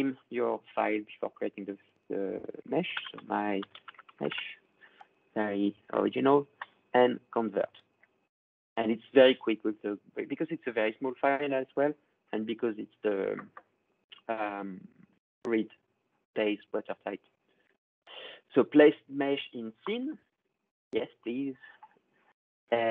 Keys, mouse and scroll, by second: 2.4-4.4 typing, 6.4 click, 9.9-11.7 drag, 19.9-22.9 drag.